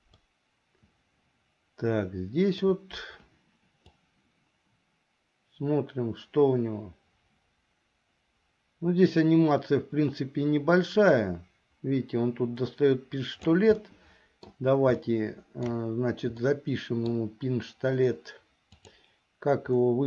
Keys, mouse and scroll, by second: 0.2-2.6 middle drag, 4.1-13.6 drag, 13.9 middle click, 15.1 shift+middle click, 16.5 middle click, 18.9 click.